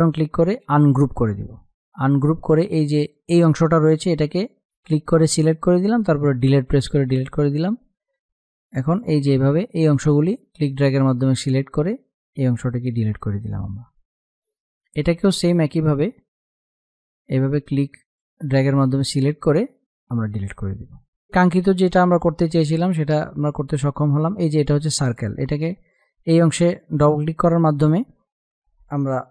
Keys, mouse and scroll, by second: 6.2 Delete, 7.4 click, 8.0 Delete, 8.8 click, 9.1 Delete, 9.4-11.2 drag, 11.2 Delete, 12.2 space, 12.3 click, 12.8 space, 13.6 click, 15.8 Delete, 17.0-18.7 drag, 18.7 Delete, 20.6 space, 20.7 click, 20.9 space, 23.4 click.